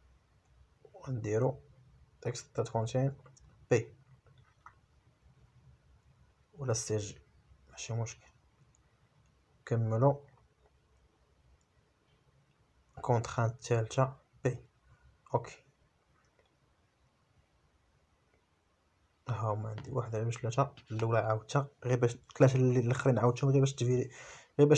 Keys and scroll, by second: 5.7 shift+a, 16.6 shift+c, 17.8 shift+j, 18.6 Return.